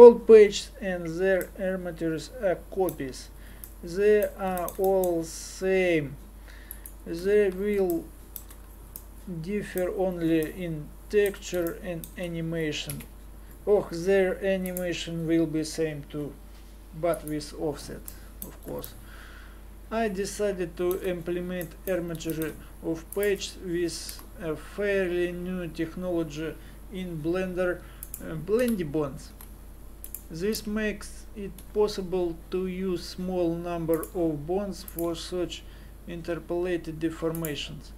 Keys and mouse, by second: 12.9 KP_Divide, 18.1 middle click, 20.2 middle click, 21.2-23.1 middle drag, 23.1 click, 24.1 g, 28.6 KP_1, 29.3 g, 30.5 z, 31.6 r, 35.0 r.